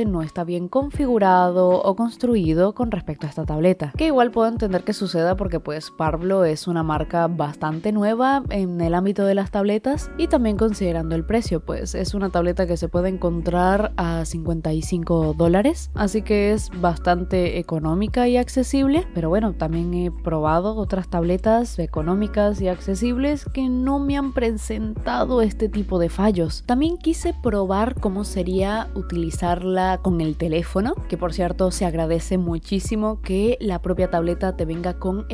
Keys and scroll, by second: 9.2 i, 11.5 i, 21.7 i, 28.2 i.